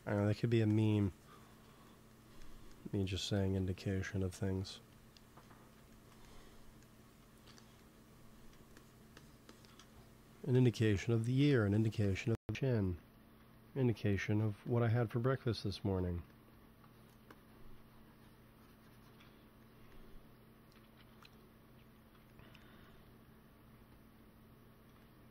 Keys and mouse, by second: 2.1 click, 3.3 KP_1, 4.0-5.6 drag, 7.0 x, 8.2 f, 8.6-13.6 drag, 13.8 f, 14.2-16.7 drag, 16.1 f, 16.8 click, 20.6 KP_1, 20.9 KP_3, 23.4 g, 23.6 f, 24.2-25.3 drag.